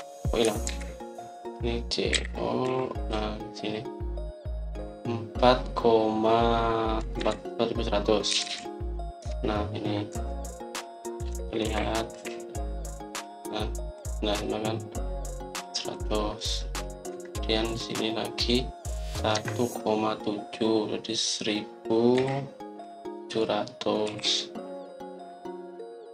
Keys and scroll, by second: 0.0 Return, 1.6 ctrl+z, 3.0-3.5 typing, 7.6-9.3 typing, 10.1 Return, 11.0 Escape, 12.1 Escape, 12.5-13.7 typing, 17.1-17.8 typing, 18.0 Escape, 20.2 Escape, 23.1 c, 24.9 o.